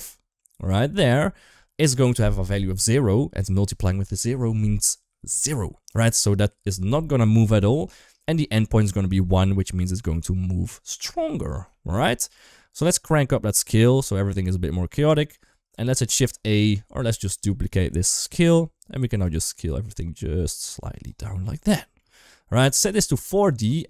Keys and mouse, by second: 7.8 shift+middle click, 8.0-8.4 middle drag, 9.5 KP_1, 10.7-11.0 middle drag, 11.5 shift+middle drag, 13.0-14.4 drag, 14.9 shift+middle click, 15.6 shift+a, 17.2 click, 17.6 middle click, 17.9 shift+d, 19.0-20.9 shift+drag, 21.1 shift+middle click, 22.7-23.4 drag.